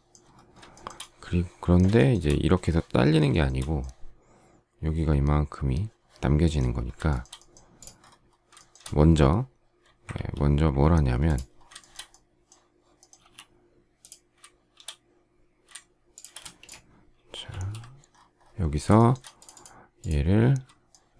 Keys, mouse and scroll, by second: 0.6 shift+middle click, 1.9 shift+middle click, 3.2 shift+middle click, 7.0 shift+middle click, 8.6 shift+middle click, 10.0 ctrl+z, 11.7 shift+middle click, 13.1 m, 16.0 shift+click, 16.3 space, 17.4 alt+f, 18.9 shift+middle click, 20.8 shift+middle click.